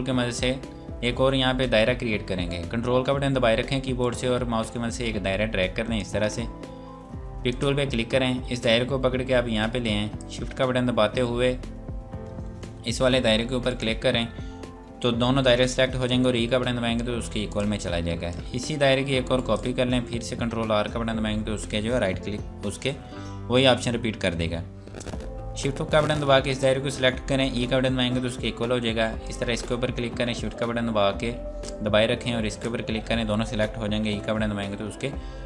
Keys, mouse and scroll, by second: 7.5 click, 13.7 shift+click, 16.4 e, 17.3 click, 18.3 click, 19.4 ctrl+right click, 20.1 ctrl+r, 25.6 shift+Num_Lock, 26.5 click, 27.7 e, 29.2 click, 32.5 click, 34.1 e.